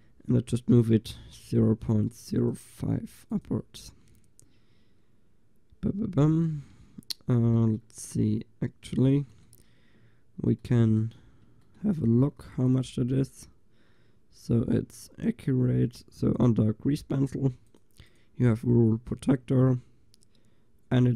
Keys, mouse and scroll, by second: 0.8 n, 1.7-4.2 drag, 6.4 middle click.